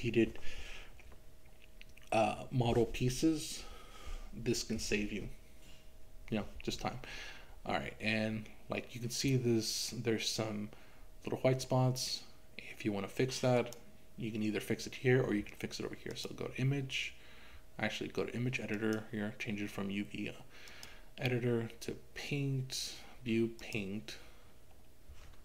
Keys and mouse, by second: 13.6 click, 16.2-19.1 drag, 20.7-23.8 drag.